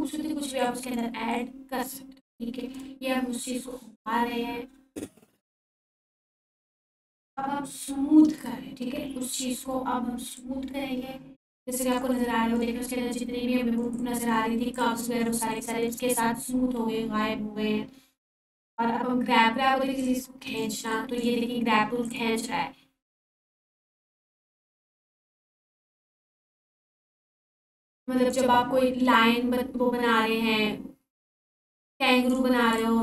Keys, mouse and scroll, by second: 0.6-1.2 drag, 7.1 click, 10.3-12.7 drag, 12.1-14.6 alt+drag, 13.9-15.4 alt+drag, 21.4 f, 22.1-22.7 drag, 31.3-32.6 drag.